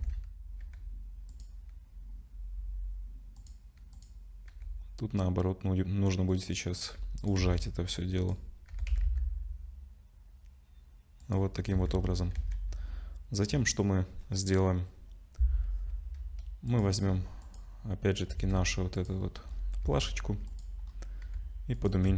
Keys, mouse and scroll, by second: 0.6 g, 3.4 click, 4.4 click, 4.5 g, 7.0 g, 7.4 Tab, 8.0 click, 8.7 g, 11.5-14.5 scroll down 9, 12.0 Tab, 12.4 ctrl+s, 16.7 click, 17.4 click, 18.4 shift+d, 19.2-19.6 scroll up 6, 19.8 s, 20.9-21.2 scroll up 2, 21.2-22.1 typing.